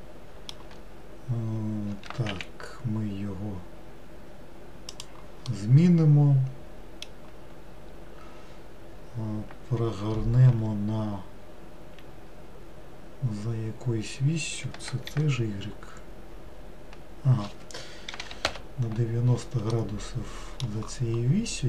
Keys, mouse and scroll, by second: 2.0 s, 5.6-8.7 middle drag, 10.6 r, 19.8-21.6 middle drag.